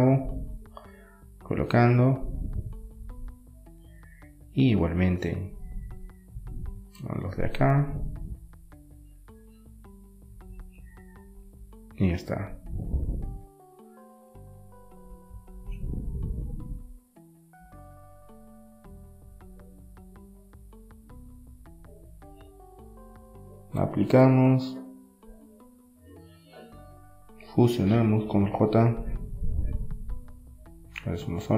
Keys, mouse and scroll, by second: 1.3-4.9 drag, 4.9-8.3 middle drag, 9.9 middle click, 10.3-11.9 right drag, 13.2-15.3 drag, 15.3-16.8 right drag, 16.8-18.0 middle drag, 18.0-20.9 right drag, 20.9 ctrl+j, 22.6 Tab, 23.4 Tab, 23.7-26.0 middle drag, 26.0-27.9 drag, 27.9-28.9 middle drag, 30.0-31.5 drag.